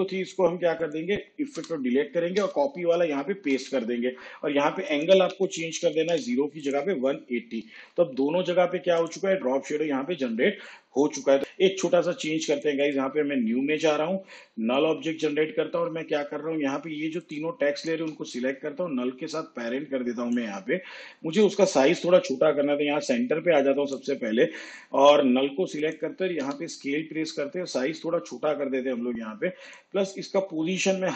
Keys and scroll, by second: 1.6 Delete, 3.3 ctrl+v, 5.4 1, 5.9 8, 6.1 0, 7.9 shift+/, 11.4 space, 26.5 s.